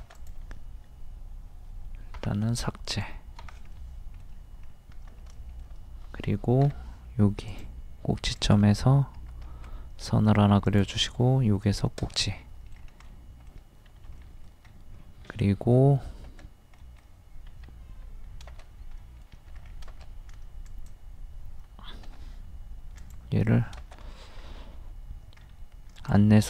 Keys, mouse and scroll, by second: 2.2 Delete, 2.9 click, 3.4 Delete, 3.7-4.7 middle drag, 4.7 scroll up 1, 5.4 shift+middle click, 7.5 click, 9.5 Escape, 10.6-12.3 drag, 12.3 middle click, 12.7-13.1 scroll down 1, 13.1 middle click, 14.6-15.1 scroll up 1, 16.8 space, 19.6 scroll up 1, 20.7-21.7 drag, 22.1 m, 23.0 ctrl+click, 24.4 t, 25.4-26.0 scroll up 1, 26.0 click.